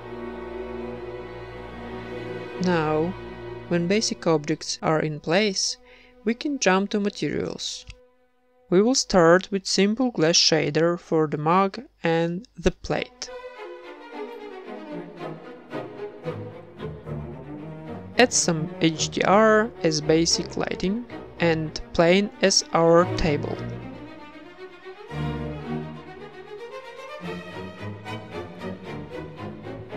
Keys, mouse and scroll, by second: 0.0-4.7 typing, 0.1 Tab, 0.3 right click, 1.1 Tab, 1.2 Tab, 1.3 right click, 1.6 Tab, 1.6 Tab, 2.0 right click, 2.2 Tab, 2.3 Tab, 2.4 Tab, 2.6 ctrl+s, 2.8 middle click, 2.8 Tab, 3.0 right click, 3.5 middle click, 3.6 Tab, 3.8 middle click, 4.1 ctrl+s, 4.6 ctrl+s, 4.8 middle click, 4.9 ctrl+s, 5.2 right click, 5.9-7.8 drag, 8.2-9.5 right drag, 8.9 ctrl+l, 10.1-11.5 middle drag, 10.6 ctrl+s, 12.0 z, 12.2 z, 12.8 ctrl+s, 13.7 z, 13.9 shift+a, 15.0 alt+g, 15.4 s, 17.1 ctrl+s, 17.8 z, 18.7 ctrl+s, 19.1 z, 20.5 middle click, 20.9-22.9 drag, 23.8 click, 24.4 z, 25.6-29.9 drag.